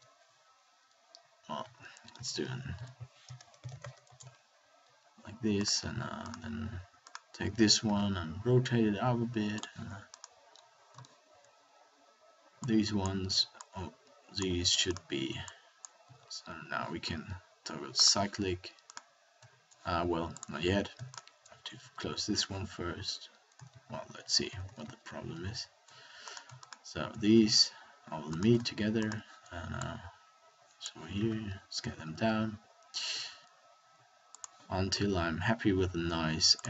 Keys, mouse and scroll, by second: 7.8 r, 10.4 middle click, 16.0 a, 16.2 a, 21.7 f, 23.6 ctrl+z, 24.2 ctrl+z, 24.8 ctrl+z, 25.3 ctrl+z, 27.3 f, 31.1 s, 34.8 s.